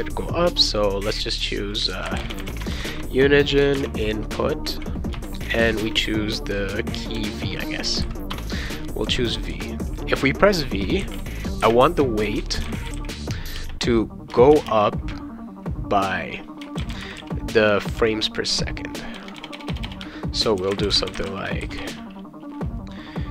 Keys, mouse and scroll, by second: 1.7-5.8 typing, 5.2 Return, 7.2 v, 8.3 Return, 11.0-13.5 typing, 14.7 space, 16.5-17.9 typing, 19.1-22.3 typing.